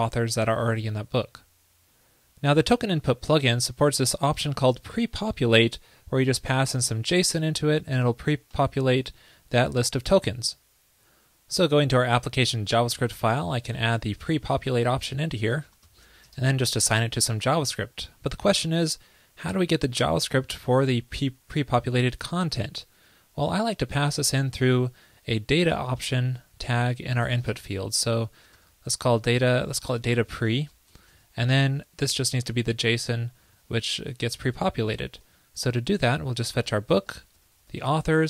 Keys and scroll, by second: 31.0 ctrl+l.